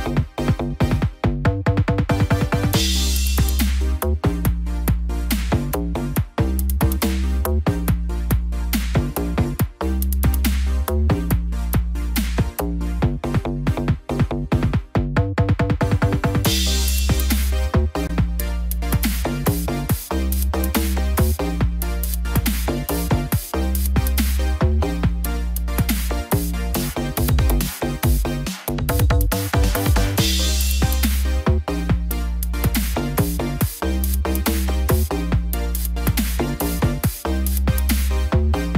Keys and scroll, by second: 19.8 ctrl+=, 27.4 ctrl+-, 27.8 ctrl+0.